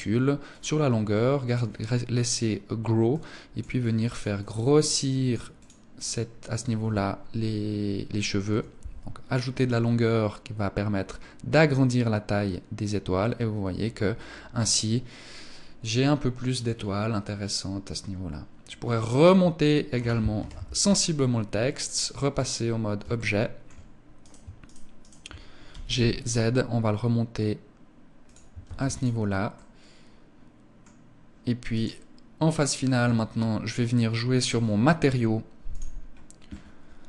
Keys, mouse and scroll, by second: 2.5 click, 3.2 click, 4.5 click, 5.0 click, 18.8 Escape, 19.8 KP_1, 21.3 click, 22.6 shift+middle click, 23.6 right click, 24.1 shift+right click, 24.4 right click, 25.1 g, 27.7 click, 28.1 ctrl+s, 28.9 middle click, 31.2 right click, 32.7 scroll up 2, 33.2 middle click, 35.1 click, 35.5-36.7 scroll up 1.